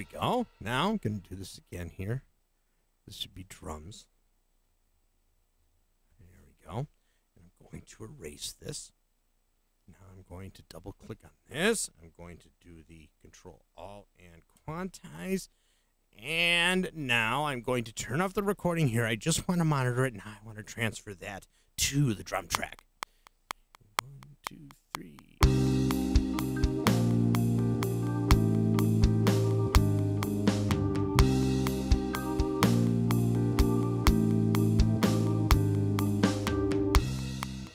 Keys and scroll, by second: 4.3-5.9 typing, 8.4 Delete, 13.3 super+a, 14.5 q, 22.5 *.